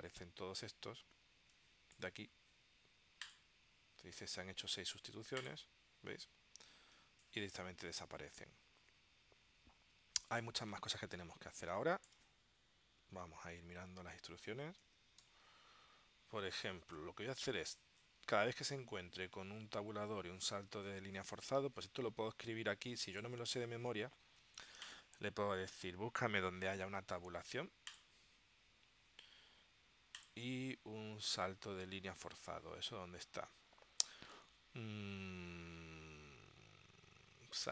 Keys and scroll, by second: 15.3 ctrl+alt+super+p.